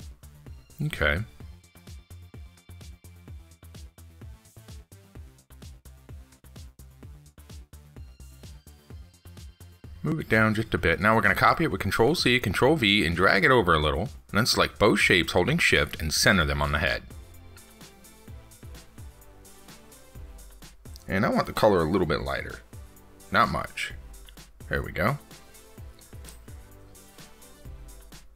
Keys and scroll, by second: 12.4 ctrl+c, 12.6 ctrl+v.